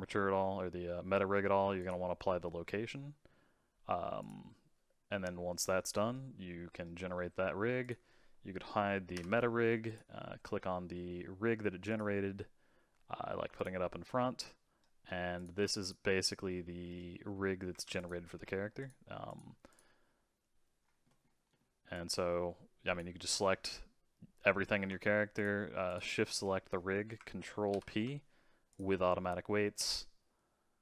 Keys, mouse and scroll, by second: 4.2-6.1 drag, 6.1-7.8 middle drag, 7.8 click, 9.1 h, 9.8 click, 11.9 click, 13.5 click, 14.1 scroll up 2, 14.4-15.3 middle drag, 15.3 click, 15.8 click, 16.8-17.9 middle drag, 17.9 click, 18.7 click, 19.2 click, 19.7 click, 20.8 scroll down 2, 21.0 middle click, 21.9 click, 23.3-25.3 middle drag, 25.3 shift+click, 25.8 shift+click, 27.7 ctrl+p.